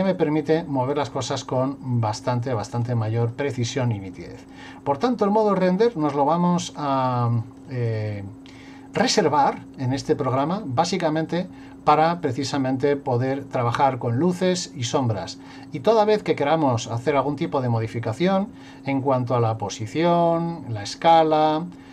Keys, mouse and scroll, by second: 0.1 click, 1.6 click, 2.8 click, 4.2 click, 5.4 click, 6.7 click, 7.6 click, 8.5 click.